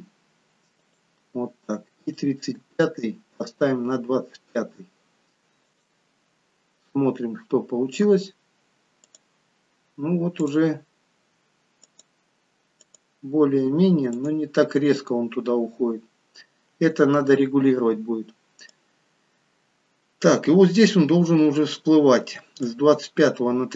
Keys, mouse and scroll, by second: 2.1 click, 2.7 g, 7.9 click, 9.1 click, 18.7 click.